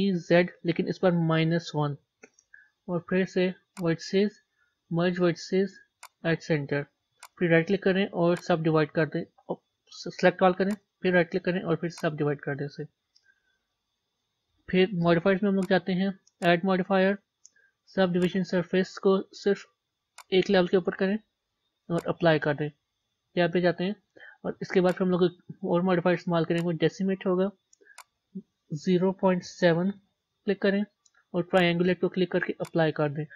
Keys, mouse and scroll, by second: 6.0-9.5 drag, 9.5 middle click, 10.2 a, 12.0-13.2 right drag, 13.2 Tab, 13.6-16.3 middle drag, 18.2-23.0 drag, 23.0 Tab, 23.8 Tab, 26.6-31.6 drag, 32.6 click.